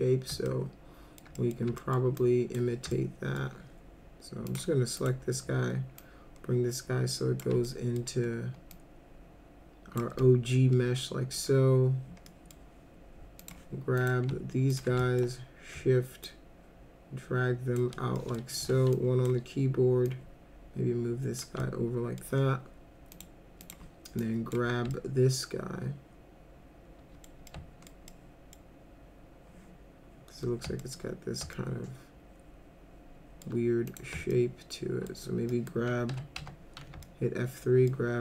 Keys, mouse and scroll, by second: 0.5 alt+middle click, 1.4 middle click, 1.8 alt+middle click, 2.2-2.5 drag, 2.9 alt+middle click, 4.5 click, 5.0 click, 6.0-7.4 shift+drag, 7.7 alt+middle click, 8.7-10.0 drag, 10.2-11.4 alt+middle drag, 12.3 middle drag, 13.4 click, 14.0 click, 14.7 ctrl+click, 15.0 alt+middle click, 16.2-17.8 shift+drag, 18.1 middle click, 18.6 1, 18.9 click, 20.1-21.4 drag, 21.6 alt+middle click, 23.1 click, 23.6 click, 24.2 click, 24.9-27.2 alt+middle drag, 27.5 alt+middle click, 28.1-28.6 middle drag, 30.8 alt+middle click, 31.6-33.4 alt+middle drag, 33.9 click, 34.3 alt+middle click, 35.5 middle click, 36.1 F2, 36.4 F3, 37.0 alt+middle click.